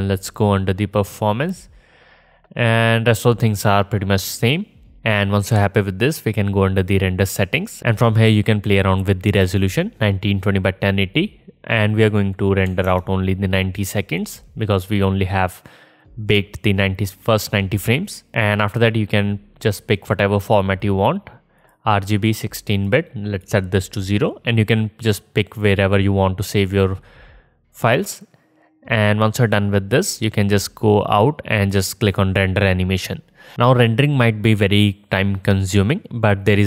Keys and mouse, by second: 7.6-12.8 drag, 12.8-15.2 middle drag, 15.2-22.5 drag, 22.6-23.2 drag, 23.3-23.9 drag, 33.4-36.6 drag.